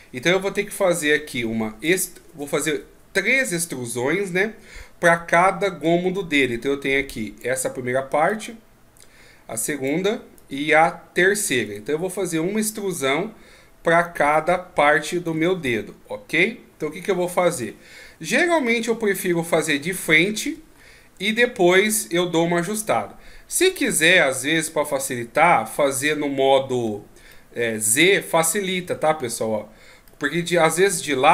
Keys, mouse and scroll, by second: 2.7 middle click, 3.7-5.3 scroll up 3, 5.3-5.6 scroll up 1, 5.6 d, 5.8 click, 7.4-8.3 d, 8.3 click, 9.9 d, 10.0 d, 10.1 d, 10.3 click, 11.4 d, 11.7 right click, 11.7 d, 16.0 d, 16.2 KP_3, 17.5 KP_1, 18.5-20.7 ctrl+scroll up 25, 20.8 shift+scroll up 2, 23.9 z, 26.8 z, 27.3 middle click, 28.8 z, 30.1 middle click, 31.0 KP_1.